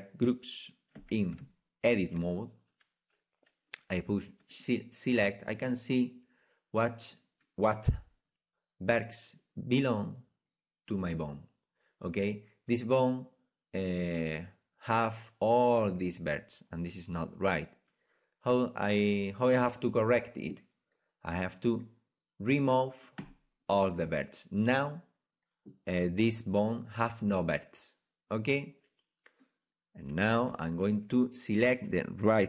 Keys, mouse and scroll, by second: 1.3 Tab, 4.6-30.5 drag, 30.5 z, 31.1-32.4 right drag.